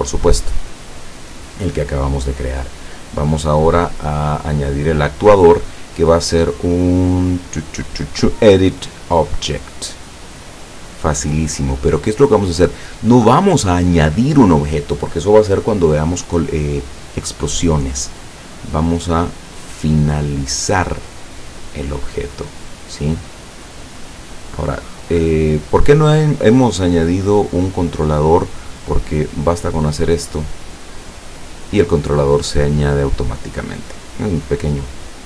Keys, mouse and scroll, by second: 2.7-4.9 drag, 5.7 click, 9.7 click, 18.6 click, 20.7 click, 23.2-25.9 drag, 27.7 click, 29.7-31.5 drag.